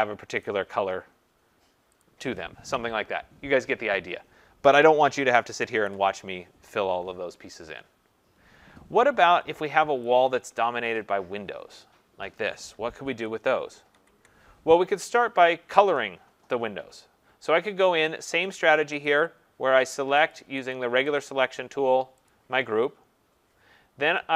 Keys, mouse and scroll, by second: 0.4 click, 2.0 click, 5.7-10.0 ctrl+0, 10.0 click, 10.1 click, 13.1 ctrl+=, 13.6 ctrl+=, 13.9 ctrl+=, 19.1 click, 20.0 click, 20.3 click, 20.7 click, 21.2 click, 22.3 click.